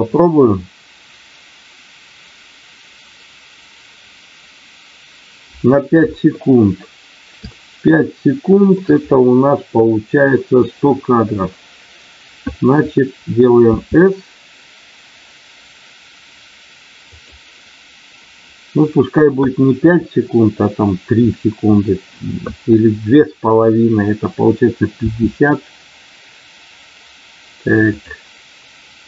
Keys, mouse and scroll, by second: 7.5-8.8 shift+middle drag, 17.0 click.